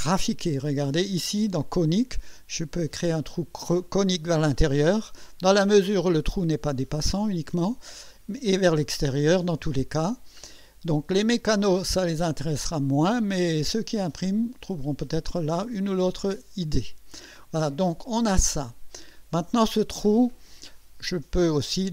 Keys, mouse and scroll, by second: 0.0 click, 1.8-2.2 scroll down 2, 2.4-2.8 scroll down 2, 2.9 scroll down 2, 3.3 scroll up 2, 3.8-4.2 scroll down 2, 4.8-5.2 scroll up 2, 7.6-7.9 scroll up 2, 8.3-9.0 scroll up 3, 10.4-10.8 scroll up 1, 11.4-13.2 drag, 13.7-15.1 drag, 16.8 click, 18.0 scroll down 2, 18.5-19.2 drag, 21.2 click.